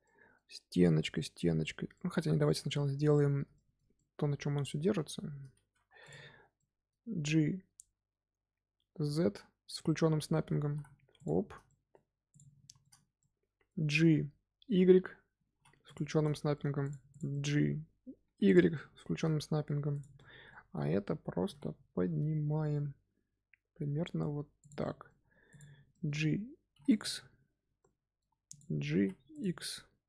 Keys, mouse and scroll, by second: 0.4 scroll up 2, 1.9-3.2 middle drag, 3.2 scroll down 1, 3.5-5.1 shift+middle drag, 5.1 Tab, 5.8 3, 6.0 click, 6.5-9.5 middle drag, 10.6 g, 11.6 middle click, 12.2 click, 12.6-15.3 shift+middle drag, 15.3 g, 16.2 middle click, 16.7 click, 17.0 click, 17.2 middle click, 18.1 g, 18.7-19.8 middle drag, 19.8 click, 20.1-21.3 middle drag, 21.3 g, 24.7 middle click, 25.4 click, 25.8 middle click, 26.6 g, 27.7 middle click, 28.4 click, 28.8 g.